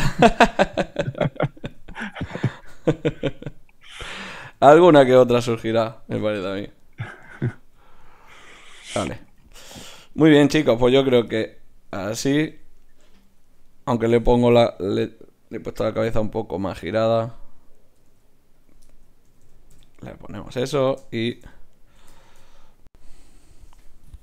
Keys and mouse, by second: 1.5 middle click, 2.0 click, 2.7-6.3 middle drag, 3.2 g, 4.5 r, 6.3-7.4 drag, 7.4 middle click, 7.5 click, 7.6 middle click, 7.7 click, 8.3 g, 10.7 g, 11.3 click, 12.3 a, 12.5 a, 15.3 e, 16.1 click, 16.6 r, 17.9 r, 19.3 a, 19.4 a, 19.7 i, 22.5 shift+z.